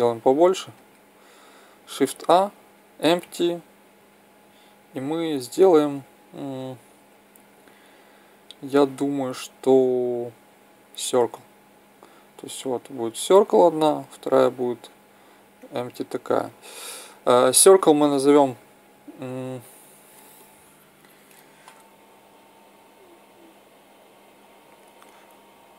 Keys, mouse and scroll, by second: 2.1 shift+a, 12.6-21.4 drag, 18.3 n.